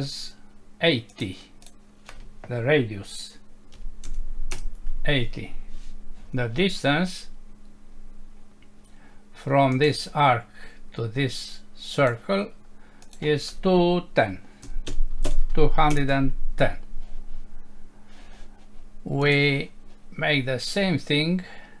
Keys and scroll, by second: 4.5 Return, 15.9 Return.